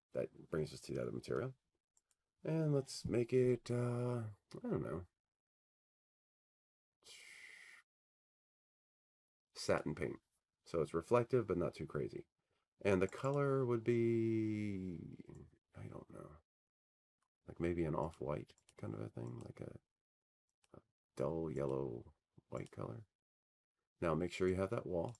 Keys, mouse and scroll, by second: 2.6 click, 3.9 click, 4.2 click, 7.7 click, 15.3 click, 18.8 click, 19.1 click, 22.7 click, 23.8 click, 24.3 click, 25.0 click.